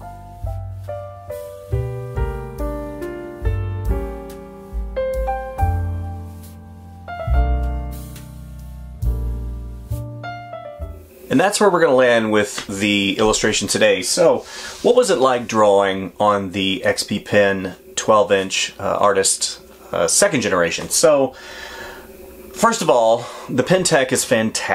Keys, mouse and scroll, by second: 0.0 space, 1.3 space, 2.2 f.